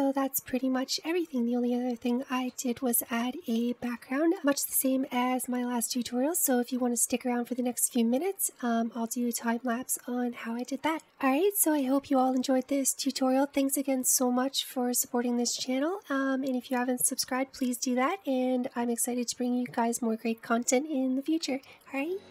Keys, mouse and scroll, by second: 1.3-2.3 scroll up 1, 2.3 shift+middle click, 2.8-3.7 scroll down 1, 3.7 middle click.